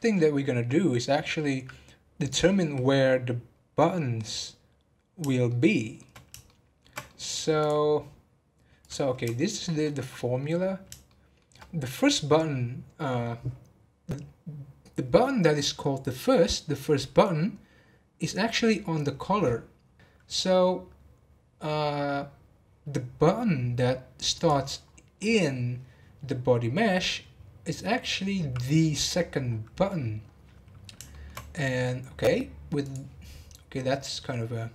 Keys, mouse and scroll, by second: 5.4-7.6 middle drag, 7.6 click, 8.8 click, 9.3-10.6 shift+middle drag, 10.6-11.0 scroll up 1, 11.0 shift+middle click, 11.6 scroll up 1, 24.8-25.3 scroll down 7, 29.4 scroll up 3, 31.1 shift+middle click, 32.0 scroll up 2, 32.8-34.7 drag.